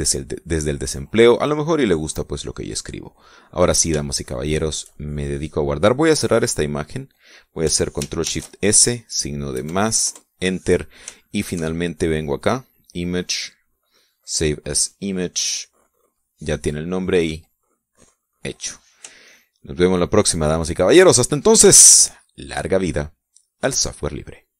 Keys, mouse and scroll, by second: 1.7 middle click, 2.8-4.5 drag, 4.5-6.1 middle drag, 7.8 click, 9.4 ctrl+shift+s, 10.7 KP_Add, 11.3 KP_Enter, 12.4 shift+middle click, 13.7 click, 16.1 click, 18.9 click, 20.4-21.3 shift+middle drag, 21.5 shift+middle click, 21.9 shift+middle click, 22.5-23.7 shift+middle drag.